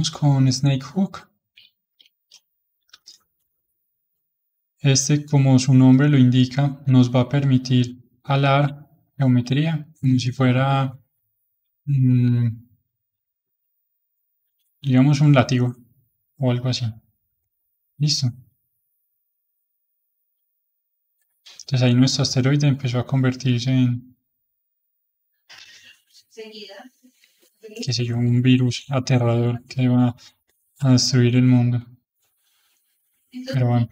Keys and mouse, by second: 0.5-3.4 middle drag, 3.4 f, 4.3-7.4 middle drag, 7.4-8.8 drag, 8.8-12.0 middle drag, 13.2-14.4 middle drag, 14.4-15.4 drag, 15.4-16.6 middle drag, 16.6 click, 17.3-27.9 middle drag, 27.9-29.1 drag, 29.1-31.2 middle drag, 31.2-32.7 drag, 32.7-33.8 middle drag, 33.8-33.9 drag.